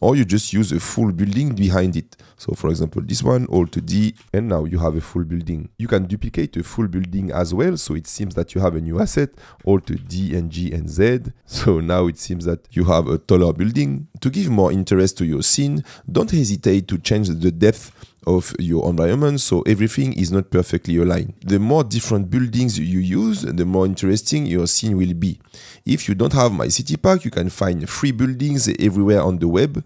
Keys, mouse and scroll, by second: 2.5 click, 3.8 alt+d, 4.0 g, 4.3-5.0 middle drag, 5.7 Delete, 6.2 middle click, 6.7 shift+middle click, 7.6 click, 10.0 alt+d, 10.0 g, 10.3 z, 11.8 middle click, 12.8 middle click, 17.9 g, 18.4 x, 29.5 middle click.